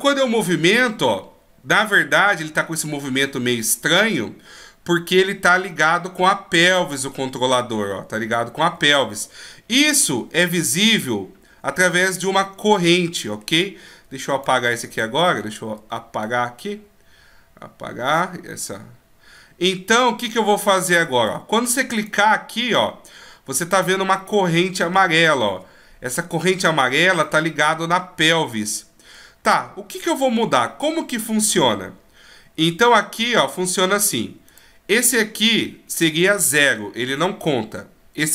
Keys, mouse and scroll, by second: 0.3 g, 9.1 middle click, 14.1-15.9 typing, 14.2 right click, 15.4-15.7 scroll up 2, 16.2 right click, 21.3 d, 22.0 right click, 22.8-23.2 scroll up 1, 23.5 middle click, 23.5 scroll up 3, 25.1-26.3 shift+scroll up 7, 27.2 middle click, 29.5-30.2 scroll down 3, 29.9 middle click, 30.7-31.2 scroll down 2, 31.2 middle click, 31.7-32.0 shift+scroll up 1, 32.0-32.3 shift+scroll down 1, 32.3-33.1 shift+scroll down 5, 33.1 shift+scroll down 2, 33.6-34.2 scroll up 3, 34.5 right click.